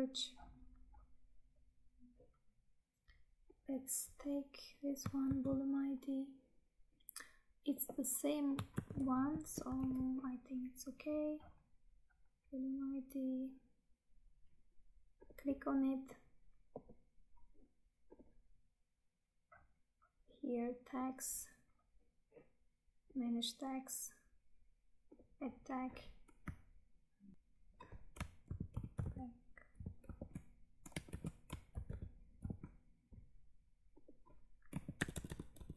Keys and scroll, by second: 5.2 ctrl+c, 8.7 ctrl+v, 9.9 Tab, 27.3 Tab, 34.6 Right.